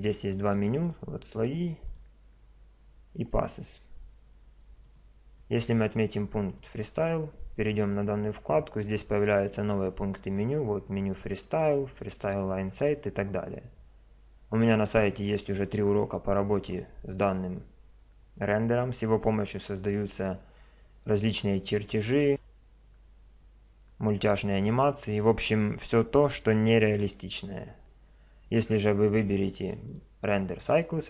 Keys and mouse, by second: 0.4-3.6 drag, 29.2 click.